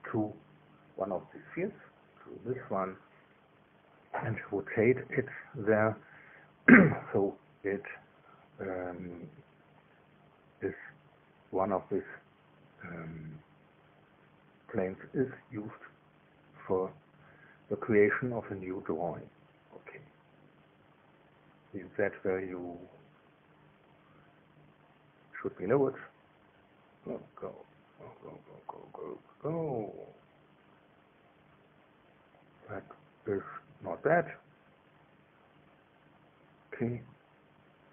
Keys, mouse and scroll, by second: 10.1 click, 12.8-14.5 scroll up 1, 15.4-18.2 scroll up 1, 18.2-20.9 middle drag, 20.9-22.6 scroll up 1, 22.6 click, 24.1-24.9 scroll down 2, 25.9 click, 27.2 scroll down 1, 27.5 scroll up 1, 27.5 scroll down 1, 27.8 scroll up 1, 27.9-28.4 scroll down 1, 28.4 scroll up 1, 28.5 scroll down 1, 28.7 scroll up 1, 28.8-30.3 scroll down 1, 30.3 scroll up 1, 30.5-31.1 scroll down 1, 31.1-32.2 scroll down 1, 32.2-33.0 scroll up 1, 33.4 click, 34.3-35.6 drag, 36.6-37.9 middle drag.